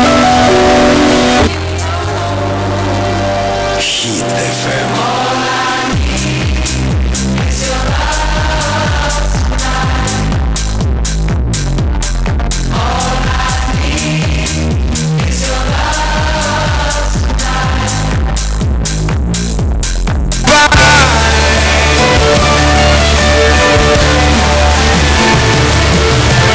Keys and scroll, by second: 1.4 Page_Down.